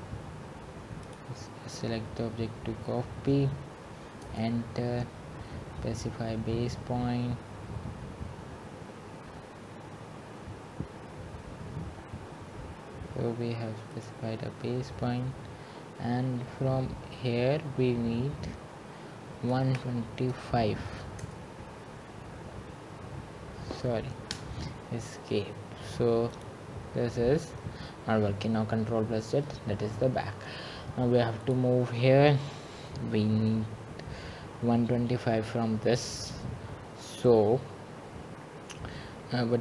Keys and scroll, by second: 4.6 Escape, 21.3-22.1 typing, 24.6 Return, 28.9 Escape.